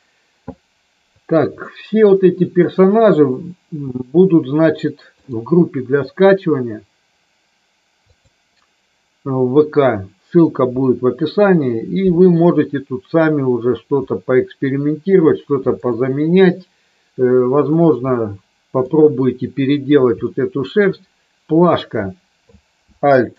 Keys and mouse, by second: 1.6-2.6 shift+middle drag, 5.1-8.2 drag, 14.0-15.1 middle drag, 18.1 middle click, 20.2 middle click.